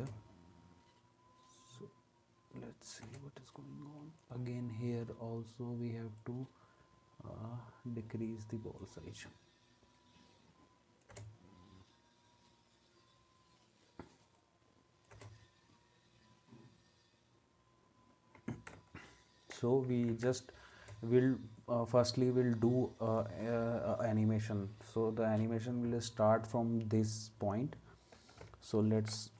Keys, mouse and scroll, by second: 0.0 space, 3.1 space, 11.1 space, 15.1 space, 20.1 ctrl+s, 20.8 space.